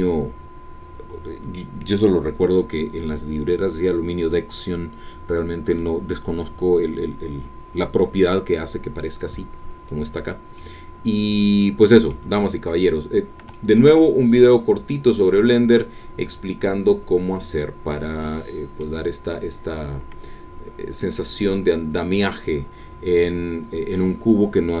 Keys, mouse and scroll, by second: 0.8-2.7 scroll down 2, 10.5-12.3 middle drag, 12.7-13.1 scroll down 2, 13.5-15.7 shift+middle drag, 15.7-19.0 drag, 19.3-19.8 scroll up 1, 20.8-22.9 scroll down 1, 22.9-23.2 scroll down 1, 23.3-23.7 scroll up 1.